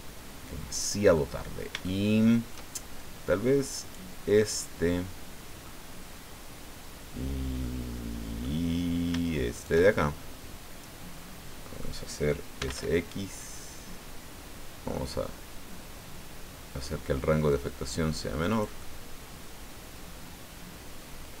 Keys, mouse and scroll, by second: 1.4-1.8 scroll up 1, 1.8 shift+middle click, 3.8 right click, 4.4-5.9 drag, 6.3 scroll down 1, 7.6-8.6 drag, 9.5 shift+right click, 9.9-12.0 shift+drag, 12.3-13.2 typing, 13.7-14.2 scroll up 2, 14.2-14.5 scroll up 2, 18.5-21.4 drag.